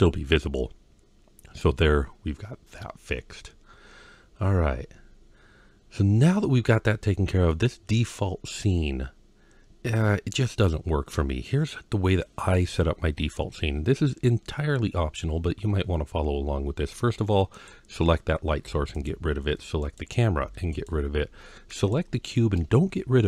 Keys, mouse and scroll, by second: 7.3-10.5 middle drag, 17.3 click, 18.4 x, 19.6 click, 20.2 x, 21.5 click.